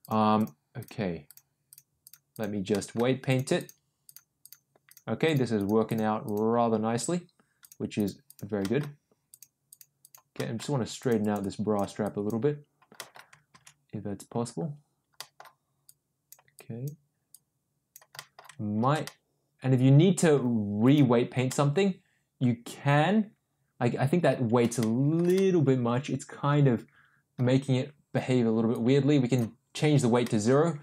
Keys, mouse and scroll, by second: 0.0 click, 0.3 click, 0.8 click, 1.2 click, 1.6 click, 2.0 click, 2.3 click, 2.7 middle click, 3.2 click, 3.5 click, 4.0 click, 4.4 click, 4.8 click, 5.2 click, 5.5 click, 5.8 click, 6.2 click, 7.5 click, 7.9 click, 8.2 click, 8.6 middle click, 9.2 click, 9.7 click, 10.0 click, 10.3 middle click, 11.0 click, 11.2 click, 12.0 click, 12.9 middle click, 13.8 ctrl+z, 15.1 middle click, 15.8 click, 16.5 click, 17.3 click, 18.1 middle click, 19.1 ctrl+z, 19.1-20.3 middle drag, 20.8 click, 21.4-24.2 middle drag, 24.7 shift+middle click, 25.3-27.3 middle drag, 28.7 click, 30.2 middle click, 30.7 click.